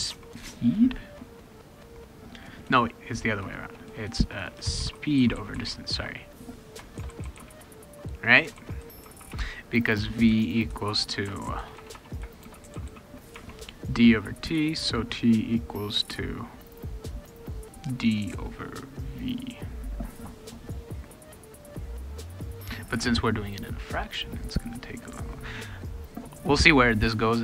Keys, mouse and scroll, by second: 0.0-0.6 typing, 2.6-7.8 typing, 8.5 ctrl+s, 11.3-13.4 typing, 14.8 ctrl+s, 22.1 click, 26.1 click.